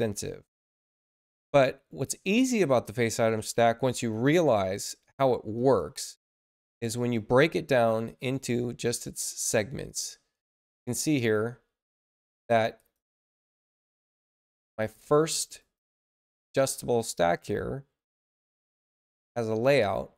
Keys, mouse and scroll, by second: 0.2 middle click, 0.4 scroll down 2, 1.0-1.3 scroll up 2, 1.7 middle click, 3.9 click, 5.5 click, 6.9 click, 8.1 click, 9.2 click, 10.3 click, 11.0 click, 12.7 click, 13.8 click, 14.6 click, 15.5 click, 18.5 click, 19.5 click.